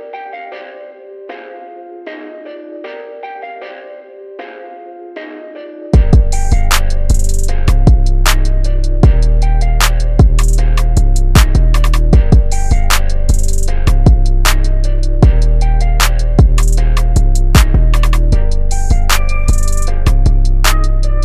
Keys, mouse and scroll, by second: 7.0 click, 7.0-21.2 drag.